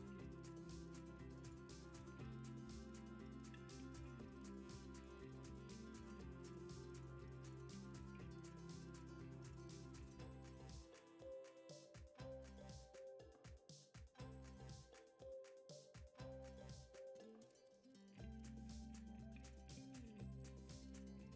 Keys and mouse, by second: 0.2 shift+d, 1.7 Tab, 2.3 drag, 2.6 s, 6.0 click, 6.5 g, 7.8 click, 8.1 g, 9.8 click, 11.5 click, 11.8 s, 12.8 Tab, 13.4 g, 14.1 r, 15.2 g, 16.4 r, 17.1-18.3 middle drag, 17.5 g, 18.5 g, 19.8 KP_1, 20.6 r.